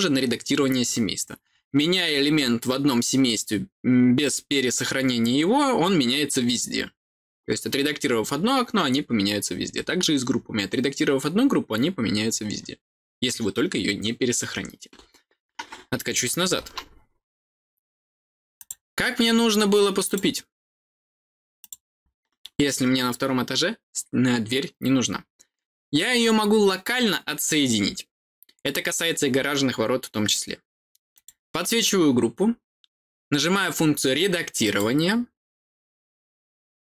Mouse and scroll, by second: 18.5 click, 20.0 click, 21.5 click, 21.9-22.6 scroll down 2, 31.1 click, 34.5 click.